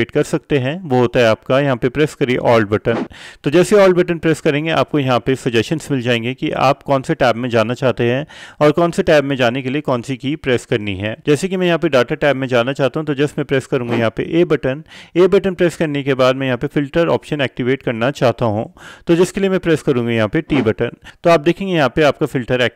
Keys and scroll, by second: 14.0 a, 20.6 t.